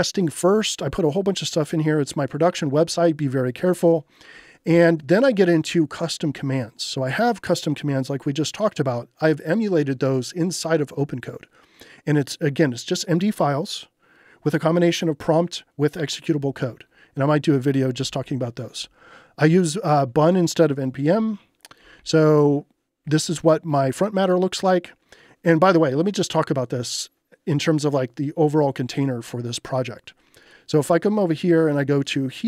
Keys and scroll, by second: 0.6 j, 17.7-22.1 typing.